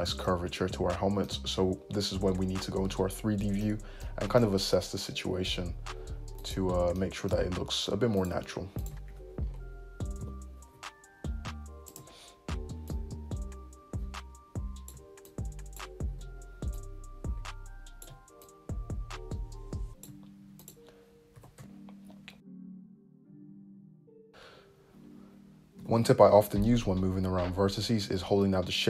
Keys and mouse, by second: 1.5-6.6 drag, 4.8 `, 6.6-7.8 middle drag, 8.3 click, 9.1 `, 10.3 g, 12.0 `, 13.0-20.8 drag, 20.8-24.0 middle drag, 21.4 g, 23.4 `, 24.0 click, 24.2 middle click, 25.9 g, 26.2-28.8 shift+drag.